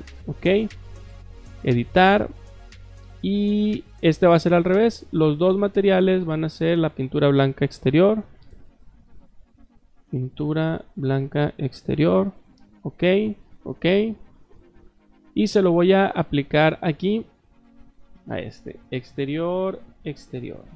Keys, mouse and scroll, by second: 1.1 click, 3.9 click, 4.9 click, 6.8 click, 7.8 click, 8.6 click, 9.1 click, 10.8 click, 11.6 click, 12.4 click, 13.3 click, 13.7 click, 15.4 Escape, 15.6 Escape, 15.8 Escape, 16.1 click, 17.9 click.